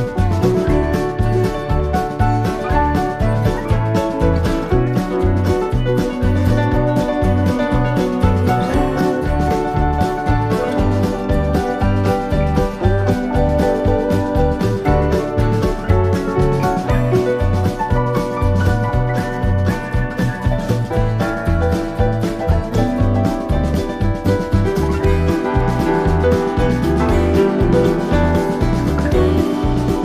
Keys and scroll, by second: 0.7 shift+Right, 1.2 shift+Left, 5.5 shift+Right, 8.5 i, 17.6 super+=, 18.4 super+=, 22.6 Right, 25.7 Left, 28.8 super+-.